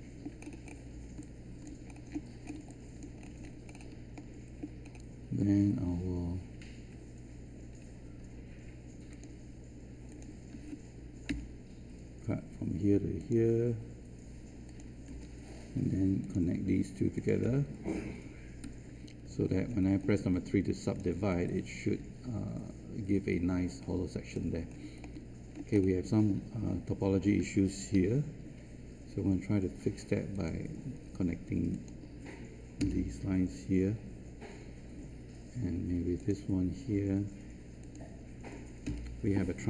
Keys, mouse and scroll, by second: 0.7 scroll up 1, 1.2 alt+click, 1.8-2.4 scroll down 1, 2.7 alt+click, 3.4 scroll up 1, 4.1 alt+middle click, 4.8 scroll up 1, 9.1 click, 11.2 Return, 13.1 click, 15.0 Return, 16.2 click, 17.4 Return, 19.0 3, 19.6 scroll down 1, 20.1 click, 21.4-24.3 alt+drag, 24.5 scroll up 1, 25.0 alt+middle click, 26.0-27.9 scroll up 1, 27.9 1, 30.3 click, 32.7 Return, 36.1 click, 38.8 Return.